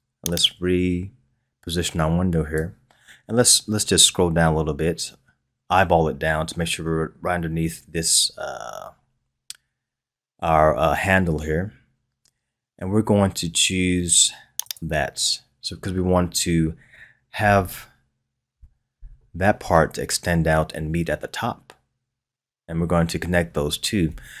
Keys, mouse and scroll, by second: 0.3-3.3 drag, 14.6 click, 18.5 KP_1.